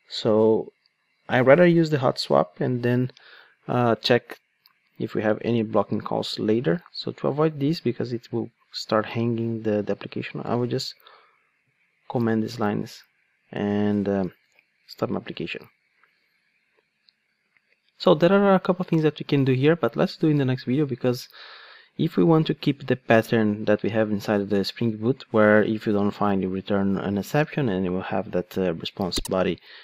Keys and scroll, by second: 10.5 super+/, 15.0 super+F2.